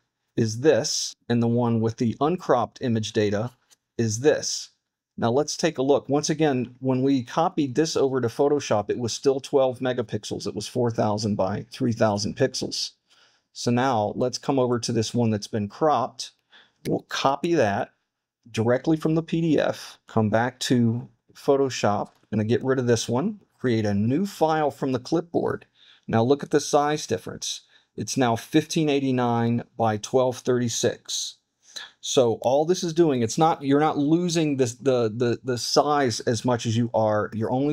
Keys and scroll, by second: 17.3 super+c, 22.1 super+w, 24.0 super+n.